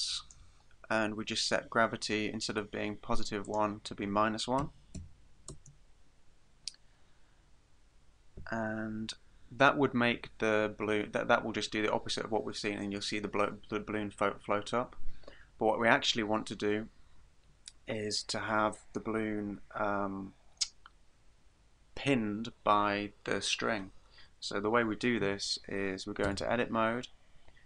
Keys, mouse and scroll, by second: 3.5 click, 25.2 KP_1, 26.3 Tab.